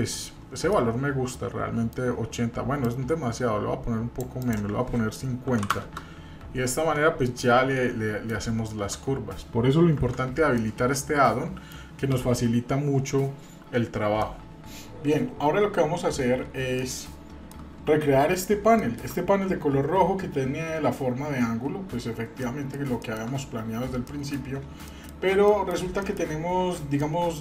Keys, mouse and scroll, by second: 0.7-1.9 middle drag, 2.8-4.3 drag, 4.4-6.6 drag, 7.3-8.3 middle drag, 10.0 Tab, 10.6-11.7 middle drag, 14.2-14.7 middle drag, 15.0 shift+middle click, 15.5 middle click, 18.4 scroll up 1, 18.8 shift+middle click, 22.4 middle click, 23.0 shift+middle click, 24.0 middle click, 24.9-25.3 shift+middle drag, 25.5 middle click, 26.0 shift+middle click, 27.0 middle click.